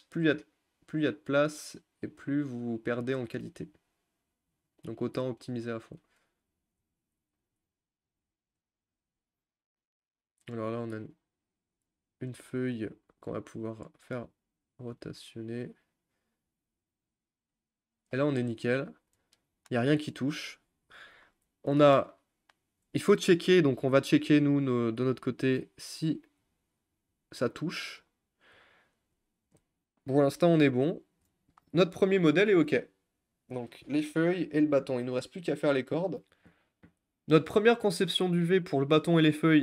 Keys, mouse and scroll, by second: 5.6 click, 6.7 shift+click, 7.5 s, 9.1 g, 12.3 click, 12.5 g, 15.1 g, 32.8 click, 36.4 Tab.